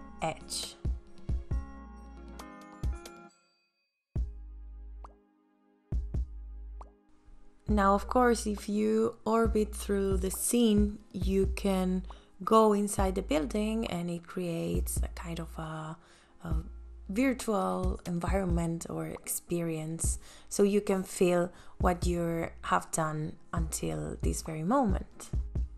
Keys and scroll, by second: 24.5 m.